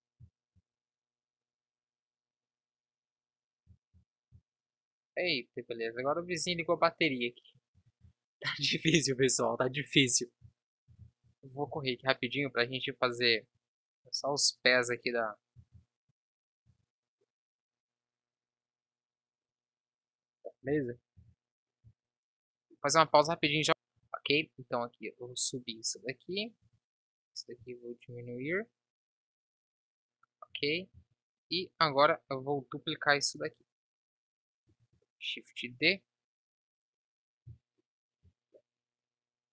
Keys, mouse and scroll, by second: 0.0 z, 3.8 ctrl+s, 4.4 Tab, 8.6 KP_1, 11.8 shift+a, 13.6 s, 16.8 Tab, 19.5 z, 20.8 ctrl+z, 21.9 b, 26.9 b, 27.9 s, 30.8 Tab, 31.7 b, 33.6 Tab, 35.0 shift+d, 39.0 KP_3.